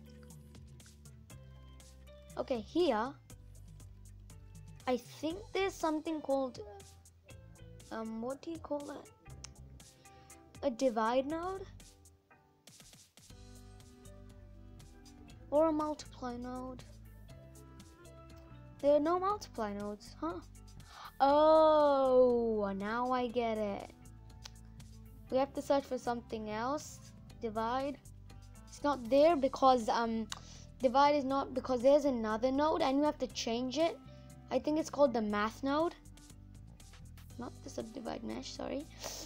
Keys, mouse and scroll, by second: 7.2-7.8 scroll up 8, 8.0-9.0 scroll down 2, 36.6 Delete.